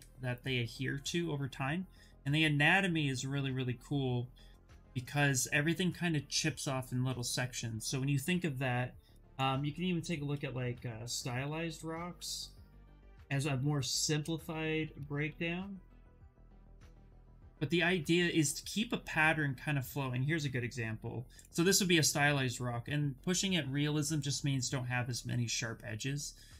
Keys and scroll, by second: 10.0-12.5 typing, 13.7-17.0 typing, 17.0 Return.